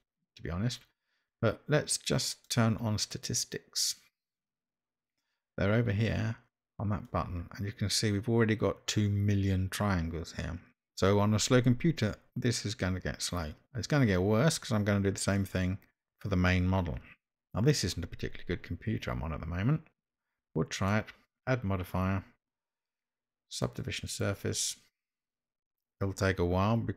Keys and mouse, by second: 2.4-6.2 drag, 7.3 click, 15.4 click, 20.9-26.9 drag.